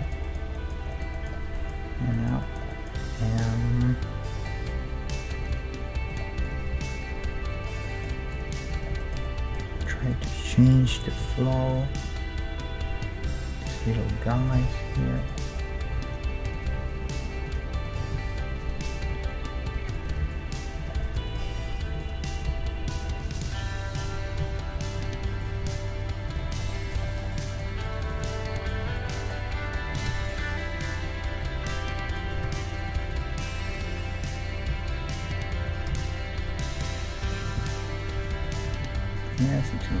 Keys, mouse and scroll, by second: 5.5 ctrl+Tab, 6.5-7.8 right drag, 6.7 g, 7.8 middle click, 8.5 g, 11.1-12.1 right drag, 11.2 k, 15.2 click, 15.5-17.0 middle drag, 16.0 ctrl+Tab, 16.7 g, 17.0 right click, 17.7-26.7 right drag, 18.0 g, 19.1 g, 20.2 g, 21.7-23.2 middle drag, 21.7 g, 22.9 g, 24.3 g, 25.6 g, 26.7-31.0 middle drag, 27.9-30.8 drag, 27.9-30.8 right drag, 30.1 alt+m, 31.6 middle click, 32.5 ctrl+Tab, 33.1-34.9 right drag, 34.7 ctrl+e, 36.0 ctrl+e, 36.8-38.2 middle drag, 37.6 ctrl+Tab, 38.2-40.0 drag, 38.7 g.